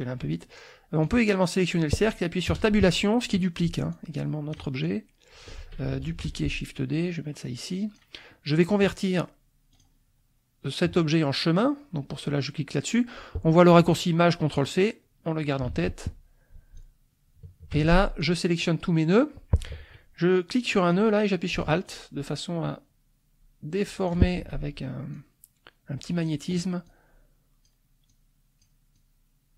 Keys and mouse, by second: 1.0-3.4 drag, 2.5 space, 3.9 ctrl+click, 4.8 ctrl+click, 6.1 ctrl+d, 6.5-8.1 ctrl+drag, 9.7 click, 14.6 click, 15.7 ctrl+a, 16.7-17.9 shift+drag, 17.8 ctrl+shift+z, 18.2 ctrl+shift+click, 20.9-24.3 drag, 24.4 alt+F1, 25.1-26.4 drag, 26.8 click, 28.1 click, 28.9-29.5 drag.